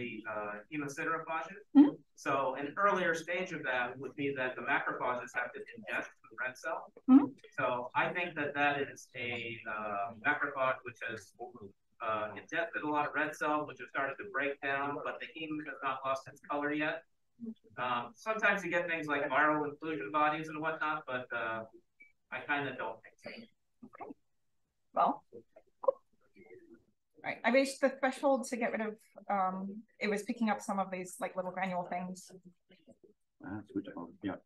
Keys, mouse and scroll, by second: 6.5-8.9 scroll down 1, 8.9-10.0 scroll down 1, 10.0-12.2 scroll up 1, 12.2-13.8 scroll up 1, 12.2 d, 13.8-15.2 scroll up 1, 15.2-16.6 scroll up 1, 16.6 click, 16.6-17.2 scroll up 1, 17.2-20.4 scroll up 1, 20.4-21.1 scroll up 1, 21.1-23.0 scroll up 1, 23.0-24.0 scroll up 1, 23.0 d, 24.0-24.3 drag, 24.0-25.5 scroll up 1, 25.5-26.0 scroll up 1, 26.0-27.0 scroll up 1, 27.0 click, 27.0-28.3 scroll down 1, 28.3-30.6 scroll down 1, 28.4 click, 29.0 drag, 30.6-31.3 scroll down 1, 31.3-34.4 drag.